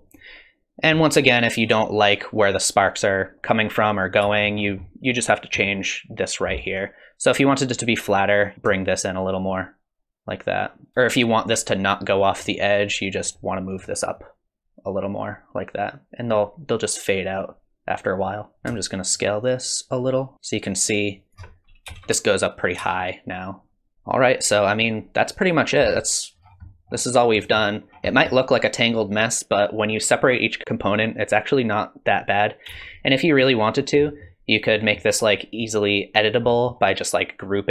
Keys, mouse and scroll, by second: 4.2 space, 4.6-6.6 scroll down 5, 4.8 middle click, 6.6-7.3 scroll up 5, 8.5 click, 8.7 shift+click, 10.9 space, 13.2 click, 14.2 shift+click, 18.5 middle click, 19.1 shift+click, 21.9 space, 22.8 space, 23.9 n, 26.4-28.2 scroll down 10, 26.7 middle click, 27.4 middle click, 28.1 middle click, 32.7 space, 34.0 middle click, 34.8 middle click, 36.5 middle click.